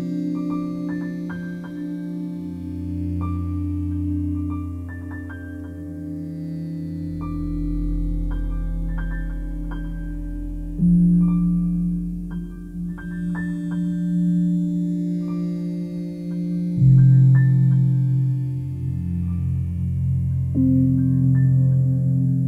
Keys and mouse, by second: 0.4 click, 1.2 alt+shift+click, 1.5-3.8 alt+drag, 5.0 s, 6.1 z, 7.3 click, 7.7-9.9 alt+drag, 7.7 typing, 10.4 typing, 11.6 click, 12.0-14.1 alt+drag, 14.4 alt+click, 15.3-17.9 drag, 18.9-20.6 alt+drag, 22.0 click.